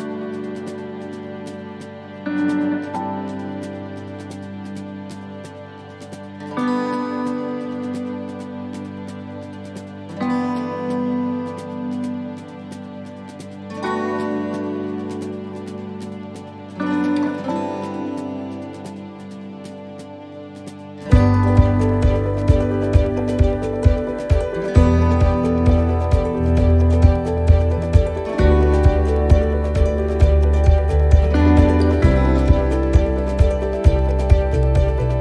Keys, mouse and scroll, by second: 0.1-0.5 scroll down 2, 0.6 right click, 1.1 middle click, 1.7 right click, 2.4 middle click, 3.6 click, 4.8 middle click, 5.3-6.0 scroll up 4, 5.8 middle click, 6.3-6.9 scroll up 2, 6.7 middle click, 9.3 scroll down 3, 9.6 middle click, 10.0-10.3 scroll down 1, 10.3 middle click, 10.9-11.3 scroll up 1, 11.3 middle click, 12.0-12.3 scroll up 2, 12.5 middle click, 26.1 middle click, 26.1-27.2 scroll up 2, 26.5 middle click, 28.0-28.5 scroll down 2, 28.5 middle click, 29.2 middle click, 29.7 shift+middle click, 30.2 shift+middle click, 31.1 middle click, 31.6 click.